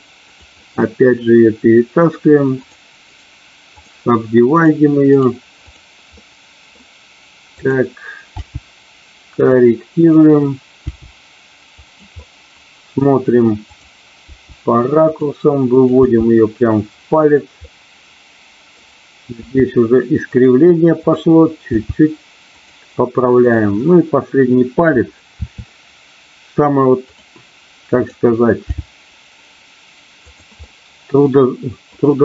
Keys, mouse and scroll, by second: 0.2 click, 0.7-2.1 middle drag, 3.1 right click, 4.6 click, 5.2 right click, 6.2 middle click, 7.6 click, 8.3 g, 9.9 click, 10.8 g, 11.8 click, 12.2 middle click, 13.6 click, 14.2 g, 15.1 click, 15.7 click, 16.1 g, 17.2 click, 17.7-18.8 middle drag, 19.4 g, 20.9 click, 21.7 g, 22.4 click, 23.4 click, 25.4 e, 27.9 click, 28.7 g, 30.2 click, 30.6-31.9 middle drag.